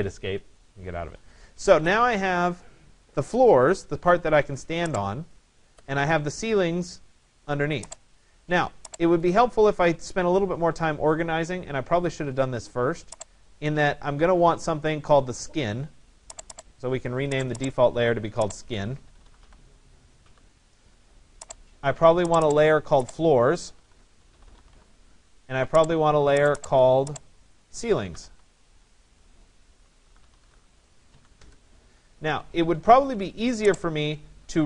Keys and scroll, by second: 31.3 Return.